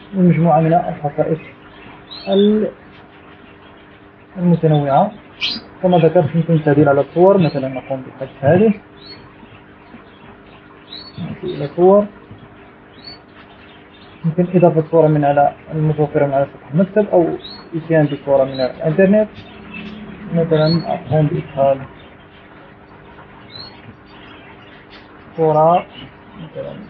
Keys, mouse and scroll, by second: 0.0-0.8 scroll up 2, 2.0-3.0 middle drag, 4.5 shift+scroll down 2, 6.0 shift+scroll down 2, 6.7-7.4 shift+scroll down 2, 8.5 Delete, 9.0 click, 10.2 Delete, 11.0-12.2 drag, 12.9 click, 14.0 click, 21.1 click, 22.4 click.